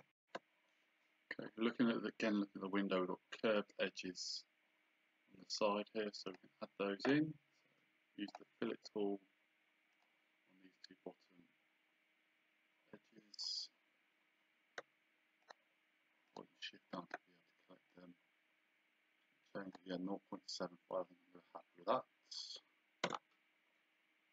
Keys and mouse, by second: 0.4 shift+z, 6.3 click, 8.3 click, 10.0 click, 18.0 click, 23.0 Return, 23.0 KP_Enter.